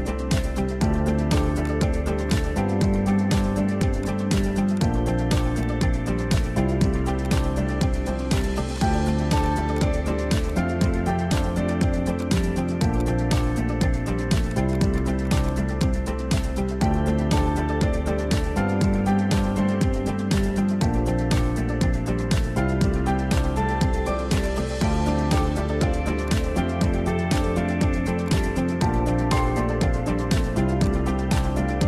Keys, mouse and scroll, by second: 0.8 `, 1.7 click, 3.1 alt+d, 4.1 alt+d, 5.7 alt+d, 6.4 alt+d, 7.8 r, 8.8 click, 9.1 r, 9.8 click, 10.0 r, 10.6 r, 12.2 click, 12.5 r, 14.6 shift+click, 14.9 shift+click, 15.4 shift+drag, 16.1 shift+click, 16.9 `, 17.7 alt+z, 18.8 alt+d, 21.7 alt+z, 22.6 `, 23.5 g, 24.8 r, 27.3 click, 28.3 click, 28.8 r, 31.3 click.